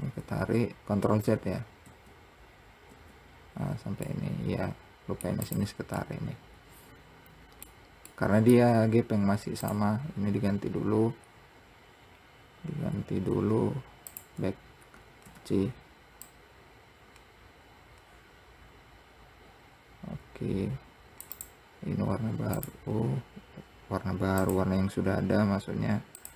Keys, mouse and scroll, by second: 4.3-5.8 middle drag, 5.8 click, 6.3-9.9 middle drag, 9.9 click, 15.1-15.6 scroll up 1, 15.6 c, 22.9-24.7 drag.